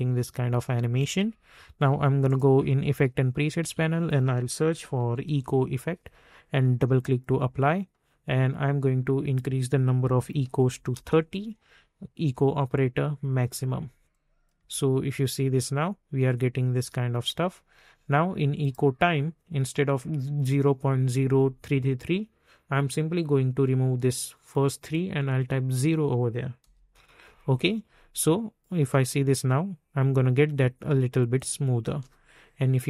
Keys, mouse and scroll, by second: 1.0 space, 2.2 click, 3.6 ctrl+a, 4.7-5.7 typing, 6.9 click, 10.0 3, 10.9 Return, 12.1 click, 14.5 space, 16.7 space, 18.6 click, 22.7 click, 26.9 Return, 28.2 click, 28.8 space, 31.8 space.